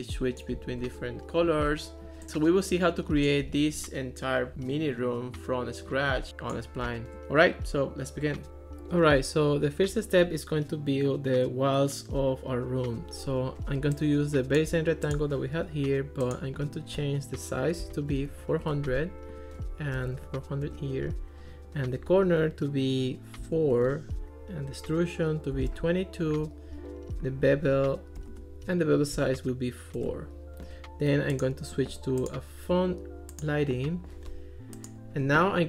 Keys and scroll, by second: 17.8 4, 18.1 0, 18.6 Return, 20.0 4, 20.3 0, 20.7 Return, 23.4 4, 23.7 Return, 25.6 2, 26.3 Return, 28.2 4, 28.3 Return, 29.2 4, 30.0 Return.